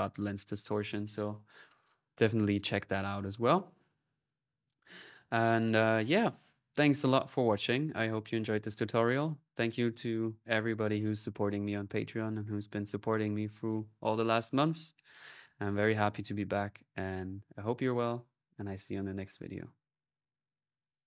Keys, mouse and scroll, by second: 1.5-3.8 drag, 4.3 click, 5.0 click, 5.8-7.2 drag, 12.6-14.1 drag.